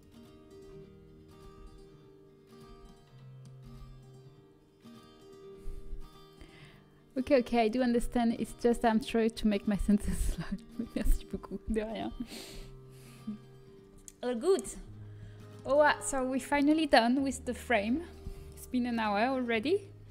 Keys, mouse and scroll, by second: 1.5 g, 2.6 z, 3.6 g, 13.8-17.8 middle drag, 14.6 a.